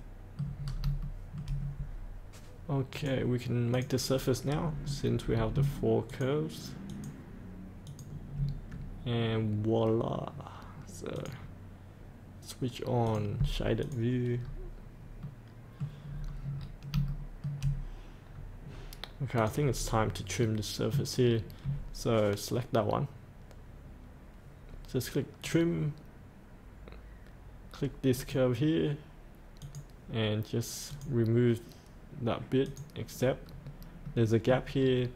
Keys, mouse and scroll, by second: 0.4 middle click, 0.6 scroll up 1, 1.1 shift+middle click, 2.9 click, 4.5 scroll up 1, 6.1 ctrl+click, 6.9 ctrl+click, 7.8 ctrl+click, 11.1 click, 14.4 scroll up 1, 15.2 middle click, 15.9 scroll up 1, 16.1-16.5 scroll down 1, 16.6-16.9 scroll down 1, 17.0 shift+middle click, 18.2 scroll down 1, 18.6-19.4 scroll up 1, 19.4 click, 19.7-20.4 scroll up 1, 20.4 middle click, 21.2-22.7 scroll down 1, 25.4 click, 33.1 click, 33.5-33.8 scroll up 1, 34.0 middle click, 34.8-35.1 scroll down 1.